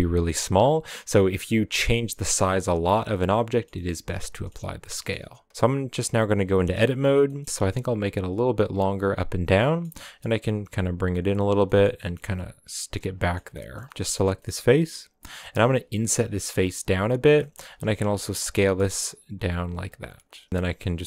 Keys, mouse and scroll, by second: 0.1 scroll down 5, 2.1 s, 3.5-3.9 shift+middle drag, 3.9 scroll up 2, 4.1-4.8 shift+middle drag, 4.8 scroll up 1, 4.9-6.4 middle drag, 6.4 Tab, 6.7-7.4 middle drag, 7.4 s, 9.5-9.9 middle drag, 9.9 s, 11.6 middle click, 11.9 g, 13.1 middle drag, 13.4 scroll up 1, 13.5-15.3 middle drag, 17.4 middle click, 17.6 s, 19.9 s, 20.5 g.